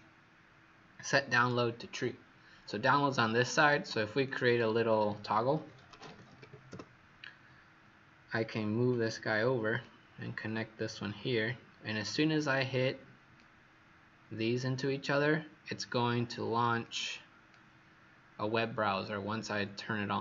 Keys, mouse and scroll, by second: 4.4 click, 5.4-6.8 typing, 8.8 click.